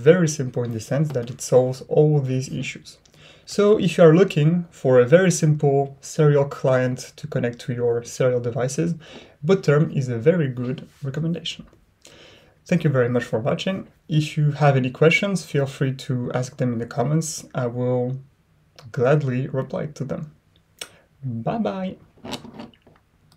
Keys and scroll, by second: 0.0 ctrl+Left.